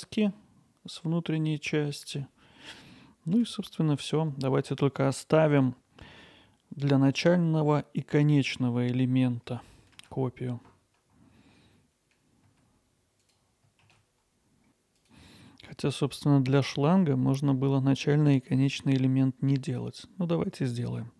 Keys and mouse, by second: 1.2-2.2 alt+middle drag, 3.4 Tab, 10.0 shift+d, 11.3 x, 11.5 shift+d, 11.7 x, 11.9 click, 12.1 ctrl+alt+middle click, 12.5 middle click, 12.7 alt+middle click, 13.3 Tab, 14.0 alt+middle click, 14.6 Tab, 18.3 Tab, 19.9 f, 20.3 Tab.